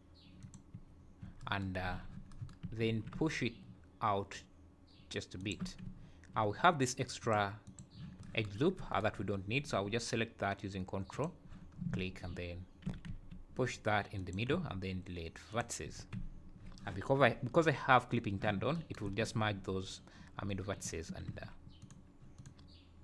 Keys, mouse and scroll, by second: 1.9 z, 2.9 alt+s, 7.2 click, 7.6 click, 11.1 ctrl+click, 11.7 scroll down 2, 12.7 `, 12.8 g, 14.5 x, 15.9 Tab, 16.3 `, 20.4 Tab, 20.8 `, 21.3 1, 21.8 click, 22.3 click.